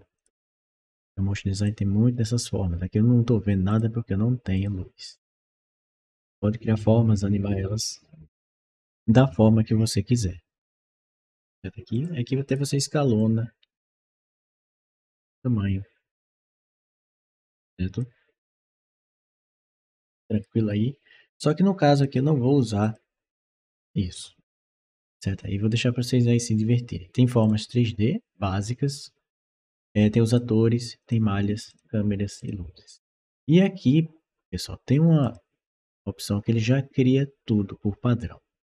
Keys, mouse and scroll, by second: 0.0 click, 0.6 click, 3.5 click, 4.4 click, 10.6 click, 11.8 click, 12.3 click, 13.0 click, 14.1-15.2 drag, 16.2-17.8 drag, 19.1 click, 20.2 click, 21.8 click, 22.7 click, 27.2 click, 30.1 click, 30.8 click, 31.5 click, 32.2 click, 35.0 click.